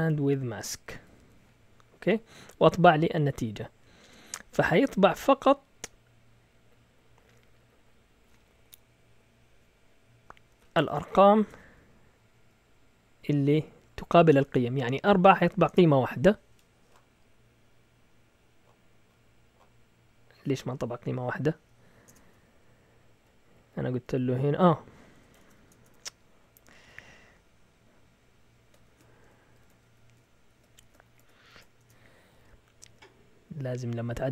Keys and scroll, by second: 0.0-1.7 typing, 10.5 Escape, 10.6-11.5 typing, 12.3 Up, 13.0 Up, 13.5 Up, 15.6 Return, 21.5 Up, 22.1 Return, 22.5 Down, 23.1 Down, 23.2 Down, 23.6 Down, 25.1 Escape, 25.4 typing, 26.8 typing, 28.9-34.3 typing.